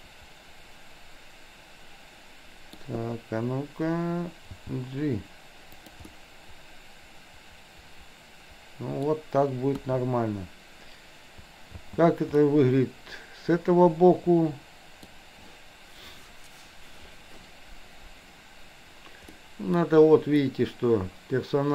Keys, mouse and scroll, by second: 4.6 g, 6.1-9.1 middle drag, 9.7 KP_1, 11.9 space, 12.5-15.2 middle drag, 19.4 scroll up 1, 19.5 middle click, 19.7 scroll down 1, 20.5-21.7 middle drag.